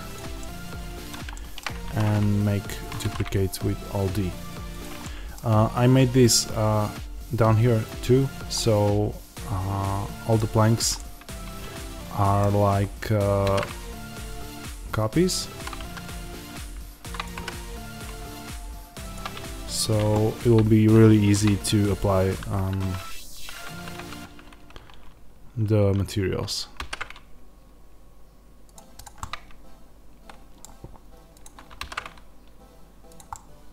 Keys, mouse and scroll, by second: 0.0 click, 0.3-15.5 middle drag, 1.8 alt+d, 2.8 click, 2.9 alt+d, 4.7 click, 5.4 scroll down 1, 13.4 alt+d, 15.5 click, 15.7 s, 17.1 click, 17.3 g, 19.0 click, 19.3-21.1 scroll up 1, 22.7 alt+g, 23.9 ctrl+z, 26.7 alt+d, 28.6 click, 29.1-31.3 middle drag, 31.3 click, 31.7 alt+d, 33.1 click, 33.2-33.7 middle drag.